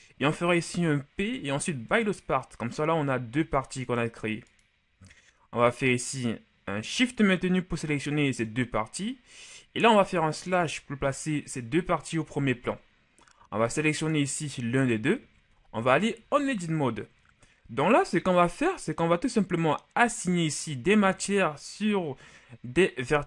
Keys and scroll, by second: 0.7 p, 3.4 Tab, 10.5 KP_Divide, 16.2 ctrl+shift+Tab.